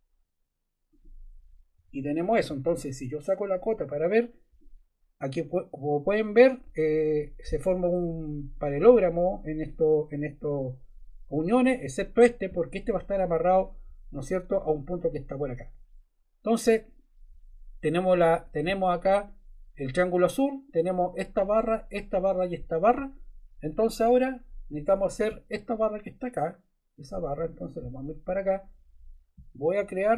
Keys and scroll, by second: 1.7 Escape.